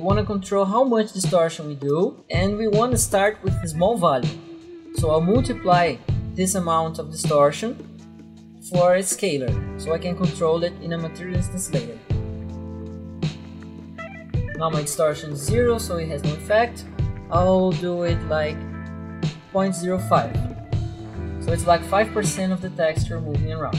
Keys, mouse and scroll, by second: 1.3 m, 2.0 click, 2.8 click, 4.2 click, 7.6 click, 8.9 s, 9.0 click, 12.5-14.0 typing, 14.0 click, 15.9 click, 19.4-20.3 typing, 20.5 Return.